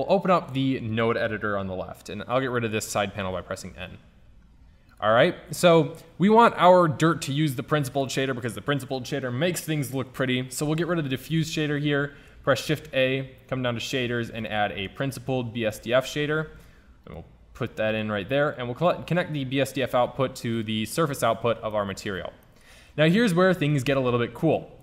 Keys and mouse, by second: 2.9 n, 5.0-5.6 right drag, 7.0-8.0 drag, 8.7 click, 10.7 Delete, 11.3 shift+a, 12.2 shift+a, 15.8 click, 15.9 shift+Tab, 16.5 g, 17.6 g, 17.8 click.